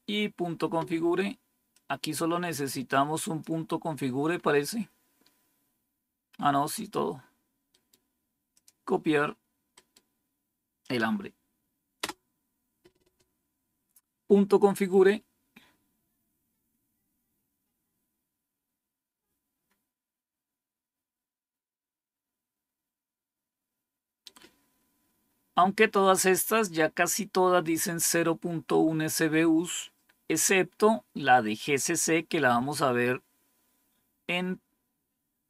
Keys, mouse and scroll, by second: 1.7-3.4 drag, 4.3-5.0 scroll up 2, 5.0 scroll down 2, 5.7 scroll down 2, 6.3 scroll up 2, 7.7 right click, 8.5 click, 9.7 right click, 10.8 click, 11.9 Return.